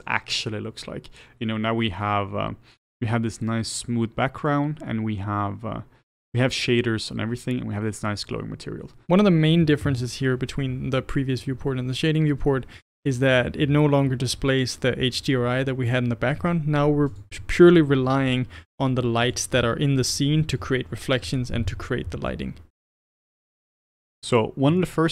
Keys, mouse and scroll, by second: 17.1 click, 19.2 click, 23.3-24.3 middle drag, 24.3-24.8 scroll up 1, 24.8-25.1 shift+middle drag.